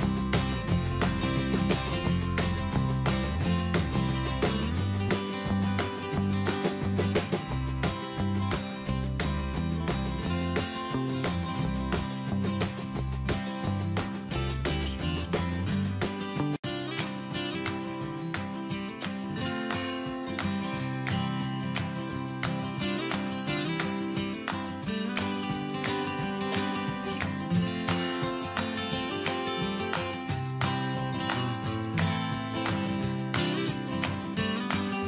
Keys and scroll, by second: 1.5 alt+Tab, 2.8 ctrl+c, 3.0 alt+Tab, 4.2 ctrl+v, 5.0 Escape, 7.2 BackSpace, 7.7 ctrl+z, 8.9 Escape, 14.6 Escape, 19.5 BackSpace, 19.9 ctrl+z, 21.9 Escape, 22.2 alt+Down, 34.7 Caps_Lock.